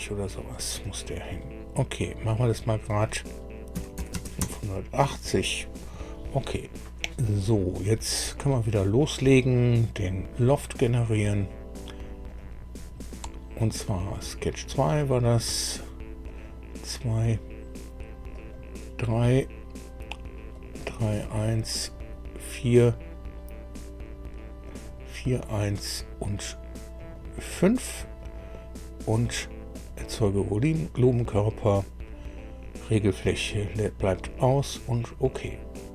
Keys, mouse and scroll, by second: 0.5 click, 2.5 click, 3.7 KP_5, 4.0 KP_8, 4.1 KP_0, 4.4 KP_Enter, 9.9 click, 12.2 click, 14.1 click, 16.2 click, 18.3 click, 20.5 click, 21.8 click, 24.6 click, 27.0 click, 29.7 click, 34.1 click.